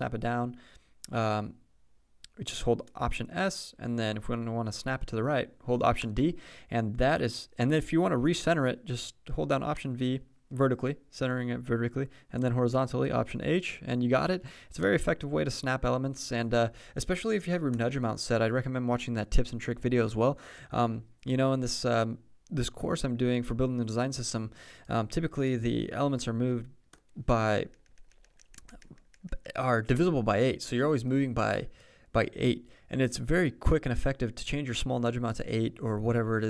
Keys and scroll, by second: 27.6 super+Down, 30.0 Return.